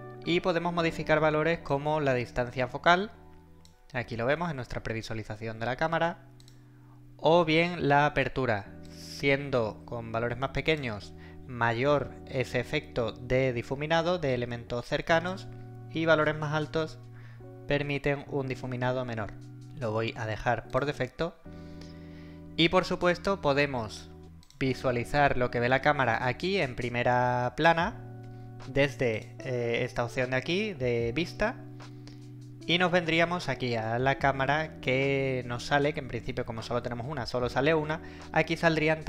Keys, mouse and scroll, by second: 1.7-3.8 drag, 6.4 click, 8.8-11.0 drag, 15.3-19.6 drag, 24.4 click, 29.2 click.